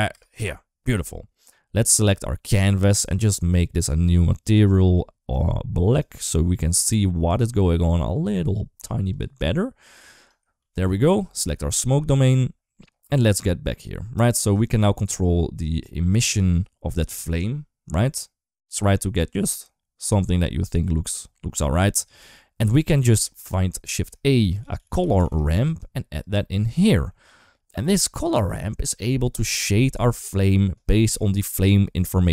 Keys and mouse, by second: 0.0 space, 1.2 click, 2.8 click, 3.6 click, 8.9 click, 10.1 right click, 10.4 ctrl+s, 11.6 click, 14.0-21.9 drag, 23.7 shift+a, 27.0 shift+middle click, 30.4 middle click.